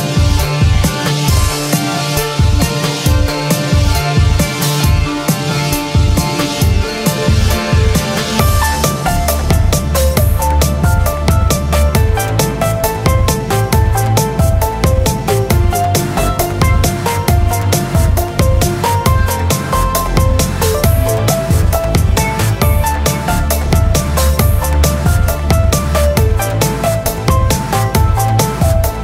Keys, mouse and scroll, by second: 1.5 shift+space, 6.5 b, 13.8 z, 16.3 KP_1, 19.7 z, 22.9 b, 27.3 middle click, 27.7 z, 28.3 middle click.